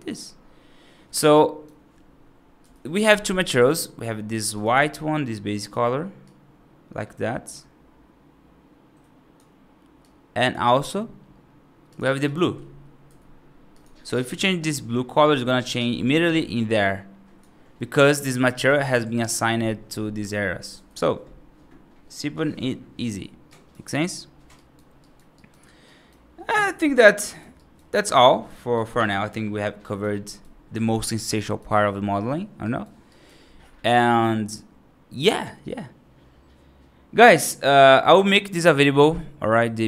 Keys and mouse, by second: 1.2 right drag, 3.4 click, 12.1 click, 23.4 right drag, 23.9 right drag, 24.4 right drag, 24.9 right drag, 25.2 right drag, 25.7 right drag, 27.1 right drag, 27.4 right drag, 27.9 right drag, 28.5 right drag, 29.7 right drag, 30.1 right drag, 31.3 right drag, 32.5 right drag, 33.0 right drag, 33.8-34.1 right drag.